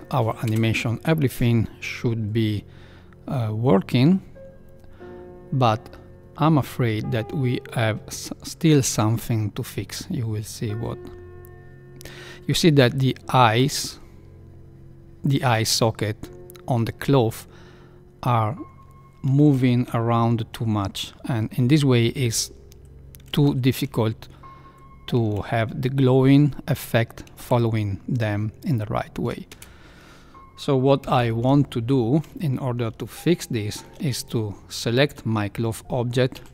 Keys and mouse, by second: 0.4 space, 13.0 space, 13.5 space, 19.5 shift+Left, 23.5 shift+Left, 25.3 shift+Left, 28.0 shift+Left, 29.5 space, 31.0 shift+Left, 33.0-33.8 shift+middle drag, 36.3 Tab.